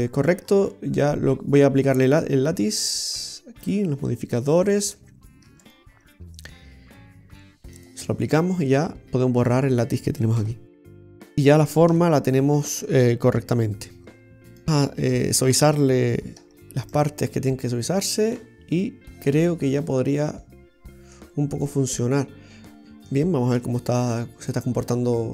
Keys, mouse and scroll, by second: 0.5-1.3 scroll up 1, 2.1 click, 3.7 click, 5.6 Tab, 5.8 right click, 7.8 click, 9.5 right click, 10.5 Delete, 11.1 middle click, 12.0 Tab, 12.7 middle click, 14.5 right click, 14.6 a, 15.2 Tab, 16.4 w, 18.4 middle click, 21.3 Tab, 21.7 middle click, 22.8 middle click, 22.8 scroll up 4, 23.7 Tab, 24.0-24.5 scroll down 4, 24.6 middle click.